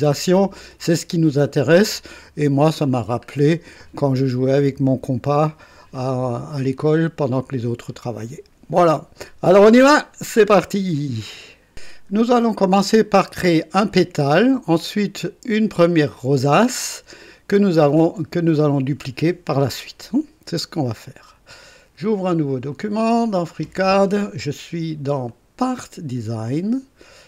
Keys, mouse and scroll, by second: 0.1 scroll up 1, 0.7-1.4 right drag, 2.7 scroll down 1, 3.8-7.0 drag, 21.0 click, 22.7 click, 25.2 click, 26.6 click.